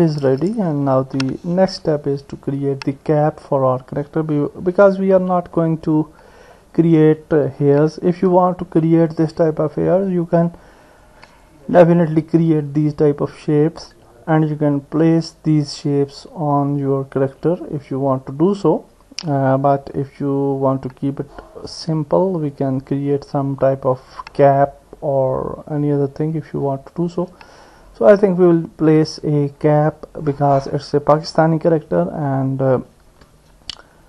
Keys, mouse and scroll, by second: 1.0 ctrl+s, 5.6 middle click, 6.5 scroll up 1, 7.8 KP_1, 11.0 click, 22.5 click, 33.3 Tab.